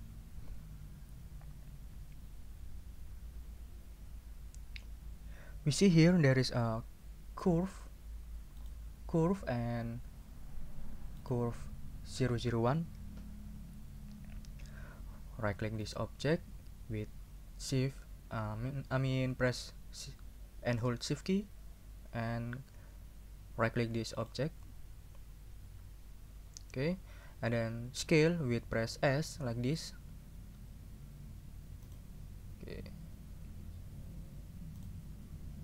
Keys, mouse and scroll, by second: 8.6 right click, 11.2 right click, 15.8 right click, 24.2 shift+right click, 26.2 shift+scroll down 3, 29.9 s, 31.8 click, 32.6 scroll down 2, 33.5 s, 34.7 click.